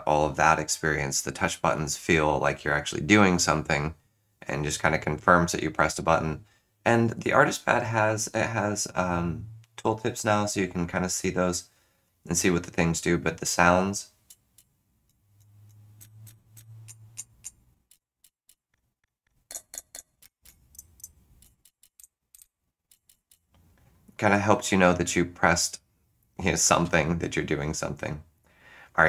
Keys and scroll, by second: 15.3 z, 15.9 F7, 16.2 F7, 16.5 F7, 18.2 ctrl+z, 18.5 ctrl+z, 18.7 F9, 19.5 F8, 19.7 F8, 19.9 F8, 20.2 Return, 20.4 Return, 21.6 ctrl+shift+z, 21.6 ctrl+shift+z, 21.8 ctrl+shift+z, 22.0 F6, 22.3 F6, 22.4 F6, 22.9 ctrl+z, 23.3 ctrl+z.